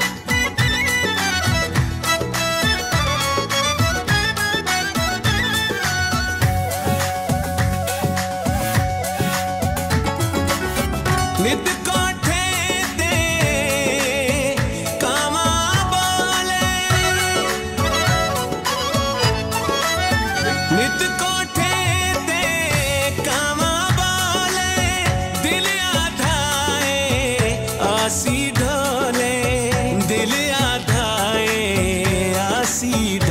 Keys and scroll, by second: 1.2 space, 1.5 Escape, 2.9 ctrl+z, 4.0 b, 4.9 BackSpace, 5.4 Caps_Lock, 5.9 b, 8.0 u, 8.7 c, 9.8-11.1 typing, 12.3 ctrl+s, 13.1 Right, 16.6 Down, 17.0 Right, 18.5 Down, 26.3 Up, 26.8 Right.